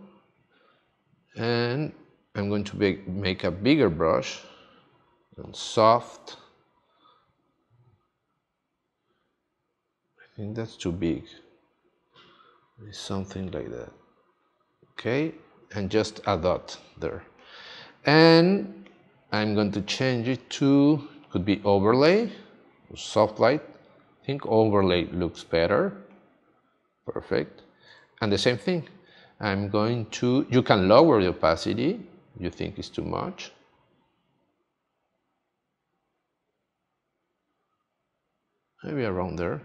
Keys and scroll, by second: 17.0 space, 27.9 space.